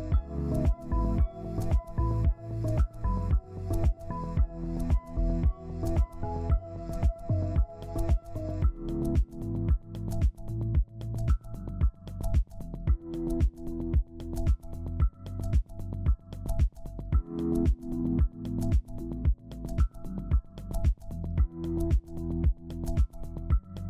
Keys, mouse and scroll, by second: 1.0 scroll up 1, 4.5 w, 6.4 Escape, 7.5 right click, 11.5 scroll down 1, 12.0 typing, 14.8 right click, 19.0 double click, 19.8 ctrl+alt+click, 21.1 ctrl+Page_Down.